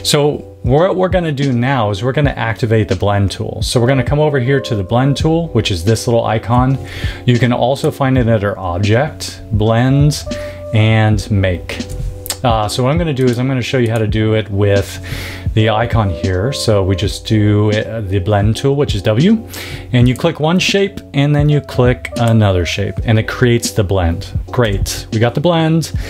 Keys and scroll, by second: 24.6 v.